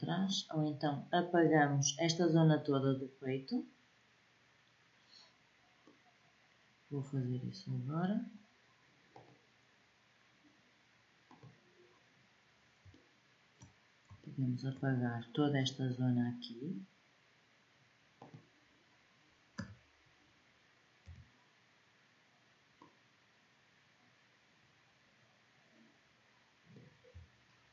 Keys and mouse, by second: 0.1-2.6 middle drag, 5.7-8.1 middle drag, 11.9-16.0 middle drag, 17.9-19.3 drag, 19.3 a, 20.8 b, 27.6 Delete.